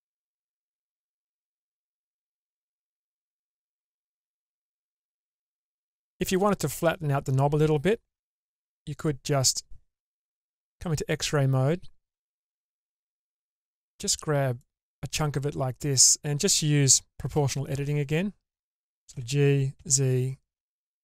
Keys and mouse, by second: 1.8-2.2 shift+middle drag, 4.2 shift+space, 4.7-5.8 middle drag, 8.4 Tab, 10.4 alt+z, 13.4-14.8 drag, 17.6 o, 19.3 g.